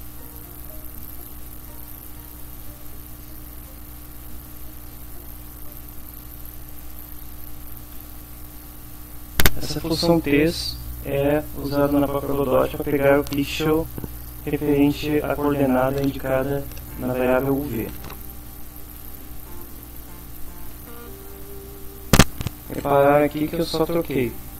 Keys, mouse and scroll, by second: 0.6 shift+[, 1.2 shift+Return, 1.7 Up, 2.1 End, 2.6 Return, 3.1 Tab, 3.7-5.1 typing, 7.4-8.9 typing, 19.0-21.7 typing, 21.2 shift+End.